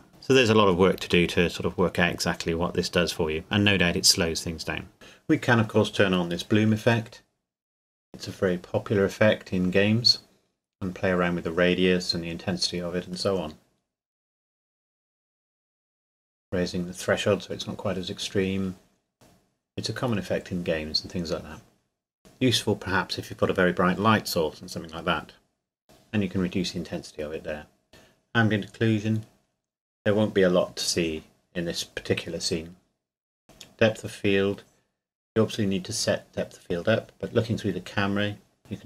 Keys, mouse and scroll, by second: 1.3 middle click, 3.3 scroll up 1, 3.3-4.4 scroll down 1, 5.9 click, 8.3 click, 22.2 click, 25.8 click, 30.8 click, 35.8 KP_0, 37.7 scroll up 1, 38.6 click.